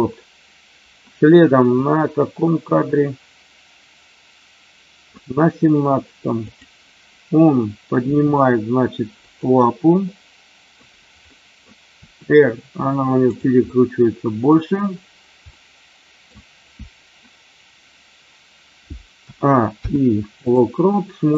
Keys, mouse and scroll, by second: 1.9-5.1 drag, 6.4 click, 8.1 r, 9.2 click, 10.1 middle click, 11.4 middle click, 11.9 r, 13.6-14.5 middle drag, 15.5 middle click, 19.2 a, 19.7 i.